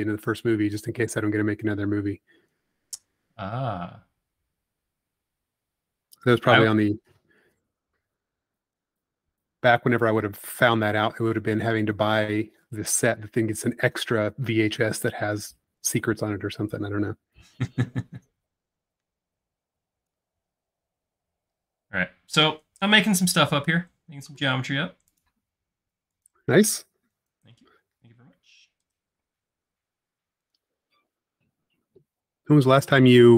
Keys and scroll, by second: 7.0 p, 10.0 Escape, 20.7 space, 24.2 l, 26.7 e, 28.0 space, 31.3 space.